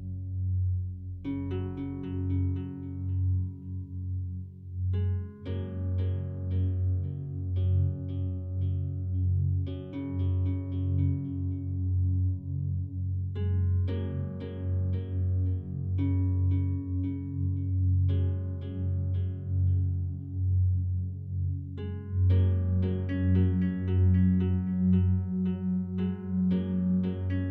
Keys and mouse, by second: 0.9 alt+click, 1.7 ctrl+alt+click, 2.5-3.1 drag, 3.4 click, 5.7 click, 7.7 ctrl+s, 10.3 click, 11.3 alt+shift+drag, 11.7 alt+drag, 12.2-12.6 ctrl+alt+drag, 12.8 click, 15.4 click, 18.3 click, 19.4 click, 20.6 click, 21.2 click, 23.0 click, 24.4-27.0 drag.